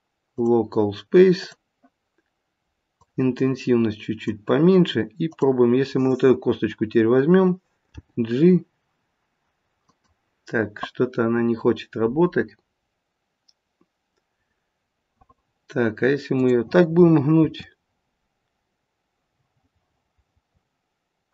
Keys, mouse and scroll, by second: 2.9 click, 5.3 click, 7.9 g, 16.3 click, 17.3 r.